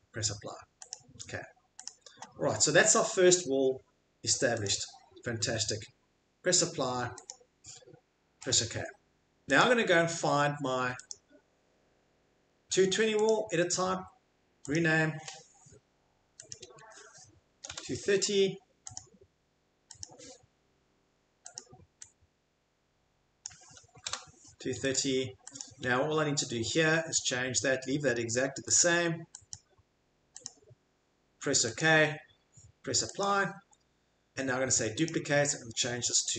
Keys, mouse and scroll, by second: 0.9 click, 1.8 click, 4.6 click, 17.5 typing, 19.0 click, 20.0 click, 21.6 click, 23.7-24.5 typing, 24.9 click, 25.6 click, 28.6-29.3 typing, 28.8 click, 29.5 click, 30.5 click, 31.8 click, 33.2 click, 35.0 click.